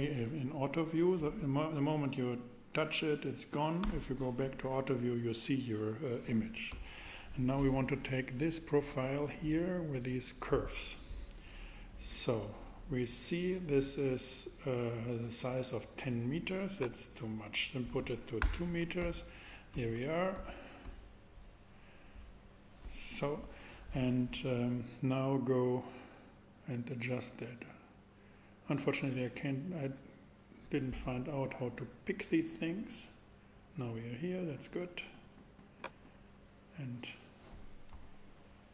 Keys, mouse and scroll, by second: 3.8 KP_7, 16.8-18.8 drag, 17.9 2, 18.4 Return, 25.2-27.1 drag, 27.1-31.3 middle drag, 31.3 click.